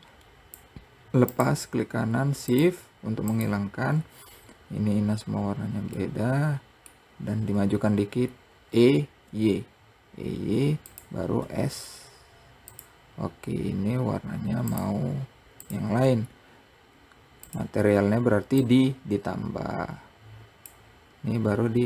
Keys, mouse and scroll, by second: 1.8 shift+click, 2.7 shift+click, 5.4-8.1 middle drag, 8.1 e, 14.1-16.9 drag, 21.3 click.